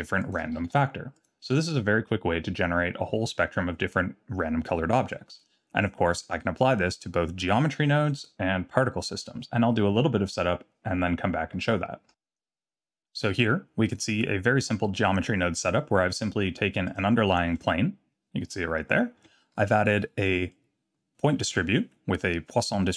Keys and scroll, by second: 0.6 shift+d, 12.1 x, 17.5 Tab, 19.2 Tab.